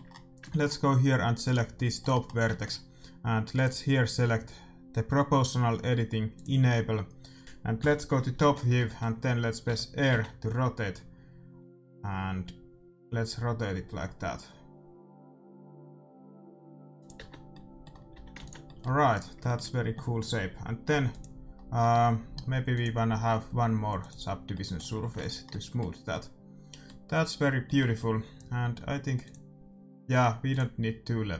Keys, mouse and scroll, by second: 1.4-3.1 right drag, 3.5-5.2 drag, 8.8-10.5 middle drag, 9.6 r, 17.1 Tab, 17.3 middle click, 18.1 a, 18.3 ctrl+s, 19.1-21.0 right drag, 21.0 middle click, 21.0-24.4 drag, 24.4 middle click, 24.8 a, 25.1 ctrl+s, 27.8-30.2 middle drag, 29.2-31.3 drag.